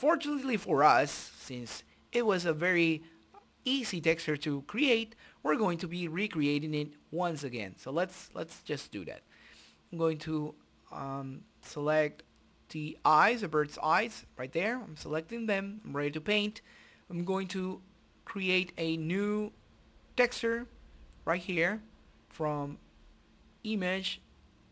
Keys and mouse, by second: 10.5 click, 10.7 shift+z, 10.8 shift+x, 11.4 shift+z, 12.1 shift+z, 13.5-16.0 drag, 15.8 KP_1, 16.2 middle click, 16.7 middle click, 17.9-20.0 drag, 23.6-24.6 drag, 24.6 t.